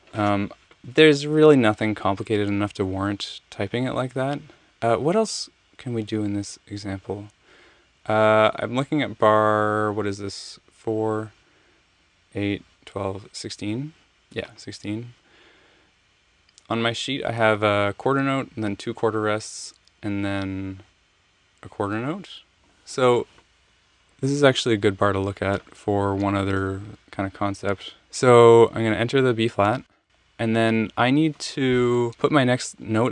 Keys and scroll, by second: 28.0 Return, 29.7 b, 30.0 alt+super+Up.